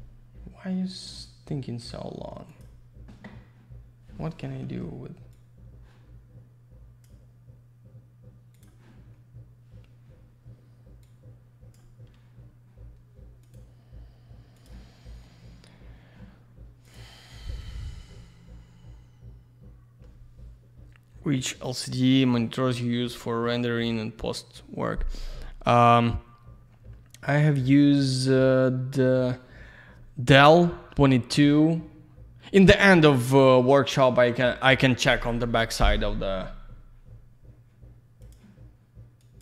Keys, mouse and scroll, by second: 2.5 click, 2.8 click, 5.3 click, 8.5 click, 8.6 click, 11.0 click, 13.4 click, 13.5 click, 16.8 click, 16.9 click, 38.5 click, 39.2 click.